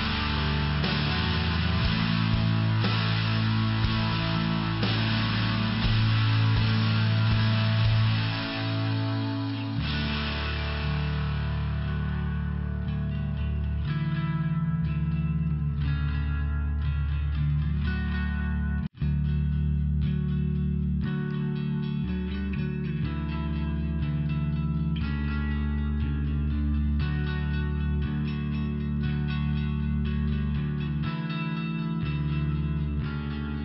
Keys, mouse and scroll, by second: 1.6 click, 2.6 click, 4.6 click, 7.9 click, 11.7 click, 12.0 click, 12.4 click, 12.8 click, 13.1 click, 14.5 click, 18.2 click, 20.5 click, 23.0 click, 25.4 click, 27.0 click, 30.9 click, 33.1 click.